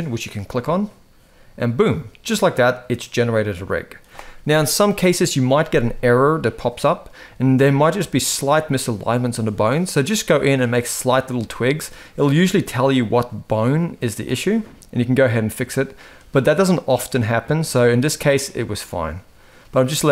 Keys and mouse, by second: 0.1 click, 1.6-2.7 middle drag, 7.1 shift+middle drag, 11.0-11.5 middle drag, 14.2-18.0 middle drag, 18.6-20.1 middle drag.